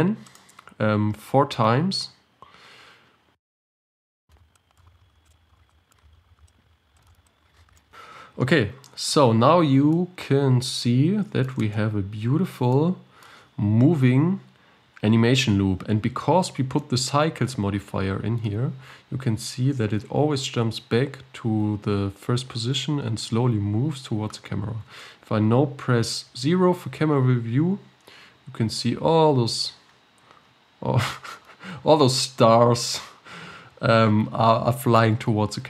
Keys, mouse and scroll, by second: 1.8-3.5 scroll down 5, 3.5 click, 3.5 scroll down 8, 3.8 click, 4.3 scroll up 10, 4.4 shift+d, 5.0 click, 5.3 scroll down 10, 5.4 scroll up 8, 5.5 scroll down 1, 5.7 shift+d, 5.8 g, 6.2 scroll up 8, 6.5 click, 7.0 shift+d, 7.3 click, 7.6 scroll up 9, 7.8-10.2 drag, 10.2-11.7 middle drag, 11.7 space, 12.8-15.0 middle drag, 15.0 KP_7, 26.3 KP_0, 27.6-28.2 scroll up 3, 28.2-29.2 scroll up 2, 29.2-29.9 scroll down 3, 29.9-31.3 scroll up 10, 31.3 scroll up 1, 31.5-32.2 scroll down 3, 32.2-32.8 scroll down 7.